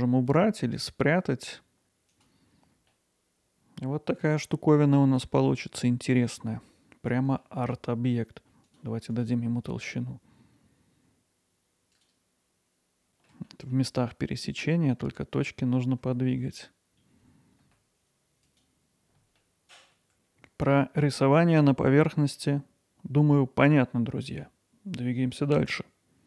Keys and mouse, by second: 2.1-2.8 drag, 3.0-7.4 alt+middle drag, 8.6-10.9 drag, 12.0 click, 13.0 ctrl+alt+middle click, 13.5 middle click, 15.2 middle click, 16.0 Tab, 17.2 w, 17.9 alt+middle click, 18.2 g, 18.8 alt+middle click, 20.0 middle click, 22.1-24.4 middle drag.